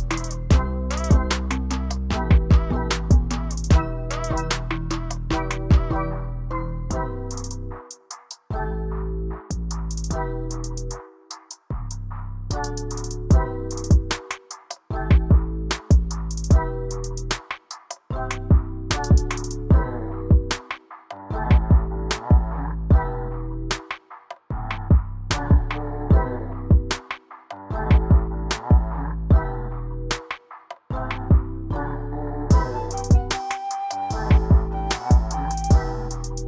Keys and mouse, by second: 0.1-2.2 drag, 3.9-5.6 drag, 8.3 click, 9.0 click, 10.7 click, 11.5 click, 16.8 click, 18.9 ctrl+z, 21.5-23.7 drag, 26.1-28.7 drag, 29.5-31.0 middle drag, 31.3 shift+click, 35.9-36.4 drag.